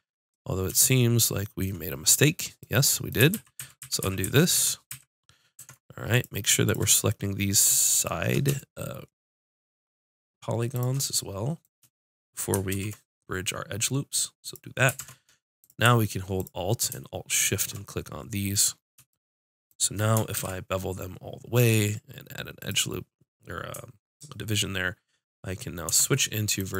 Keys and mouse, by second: 3.3 ctrl+z, 3.5 ctrl+z, 3.8 ctrl+z, 4.0 ctrl+z, 4.2 ctrl+z, 4.5 ctrl+z, 4.8 ctrl+z, 5.5 ctrl+Tab, 6.6-8.4 drag, 11.0-14.3 drag, 12.7 ctrl+e, 14.9 ctrl+Tab, 16.3-17.8 drag, 18.0 click, 20.3 ctrl+b, 22.7-25.8 drag, 25.8 ctrl+Tab.